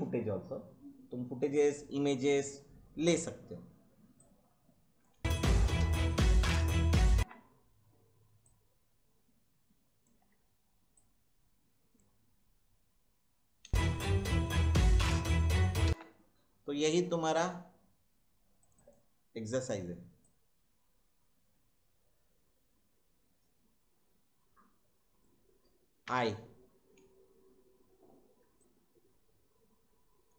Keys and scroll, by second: 5.1 space, 7.1 space, 13.6 space, 15.8 space, 26.0 i.